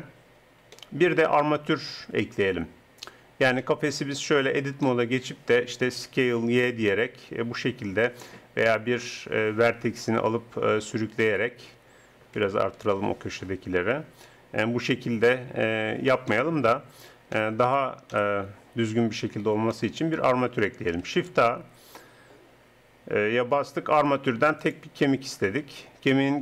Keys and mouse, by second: 4.5 Tab, 6.0 s, 6.8 middle click, 8.7-10.5 drag, 10.3 g, 12.6 ctrl+KP_Add, 12.8 ctrl+KP_Add, 13.1 ctrl+KP_Add, 14.3 g, 17.0 Tab, 18.1 KP_1, 21.1 shift+a.